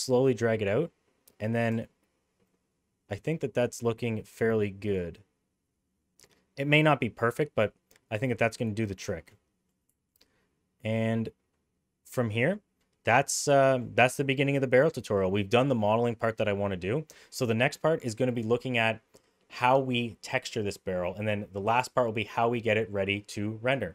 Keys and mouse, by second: 2.4-8.2 middle drag, 8.6 middle drag, 9.2 shift+middle click, 9.3-9.7 middle drag, 10.0 shift+middle click, 10.2-12.5 middle drag, 13.3-13.8 middle drag, 15.3-15.9 middle drag, 16.4 middle click.